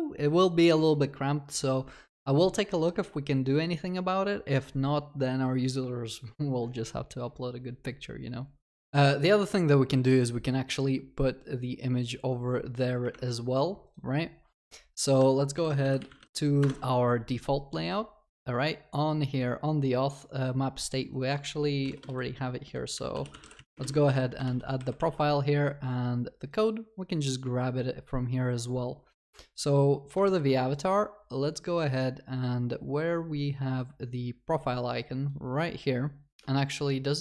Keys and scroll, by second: 15.6 ctrl+shift+n, 16.6 ctrl+shift+n, 24.5 ctrl+w, 25.6 ctrl+s, 30.2 ctrl+c.